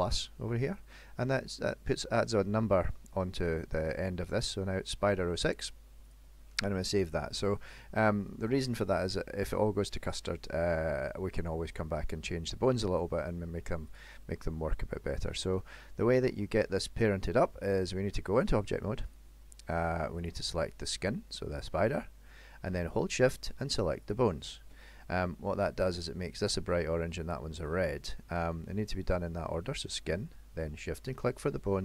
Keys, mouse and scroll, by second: 6.2 click, 7.4 middle click, 8.7 shift+middle click, 10.0 middle click, 10.4-11.0 scroll up 4, 11.9 middle click, 13.9 click, 16.4-17.0 scroll down 4, 17.1 middle click, 18.5 click, 20.4 click, 24.1 shift+click.